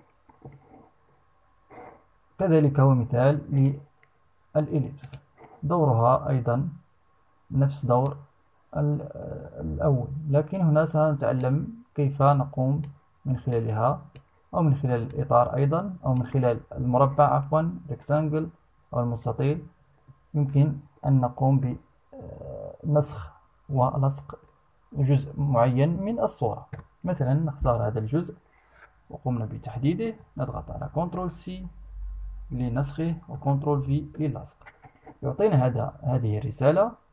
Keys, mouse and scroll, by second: 4.5 click, 7.6-11.2 drag, 11.7 click, 13.0 click, 14.6-15.9 drag, 26.3 Return, 30.4 ctrl+c, 32.9 ctrl+v.